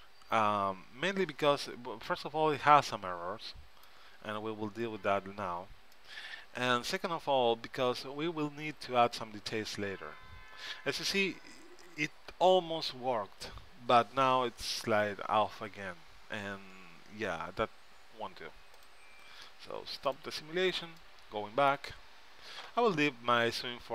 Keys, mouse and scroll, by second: 3.4-4.8 middle drag, 7.0-8.3 middle drag, 19.5-22.0 drag, 21.1 middle click, 21.1 right click, 22.0-23.9 middle drag.